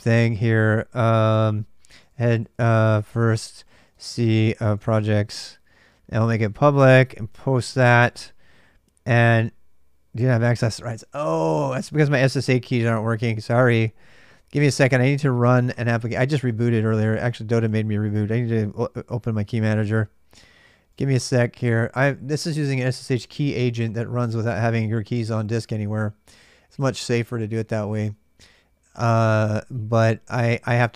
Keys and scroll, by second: 0.0-30.9 typing.